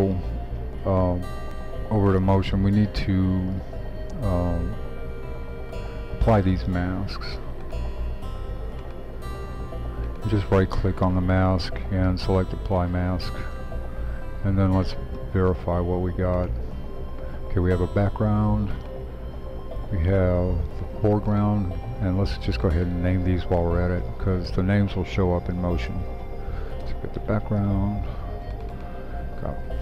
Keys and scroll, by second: 23.9-26.6 typing, 26.8 Return, 28.0 typing.